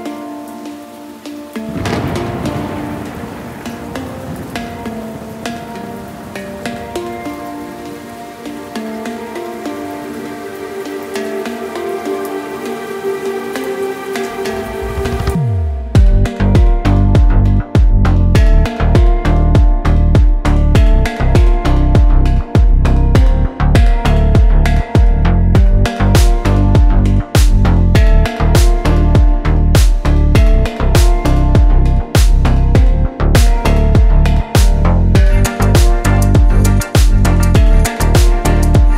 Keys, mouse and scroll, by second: 6.7 click, 8.4 click, 12.1 click, 14.8 g, 17.6 right click, 20.8-22.4 middle drag, 25.8 g, 31.2 click, 31.9-33.5 middle drag, 34.2 3, 35.1 click, 35.7 shift+click, 37.2 click, 38.6 1.